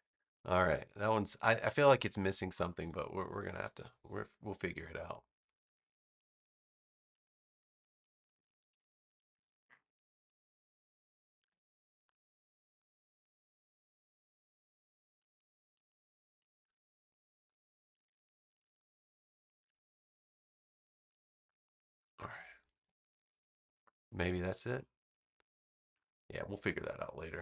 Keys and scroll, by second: 0.4 space, 3.3 super+=, 4.7 space, 22.6 super+-, 24.1 space.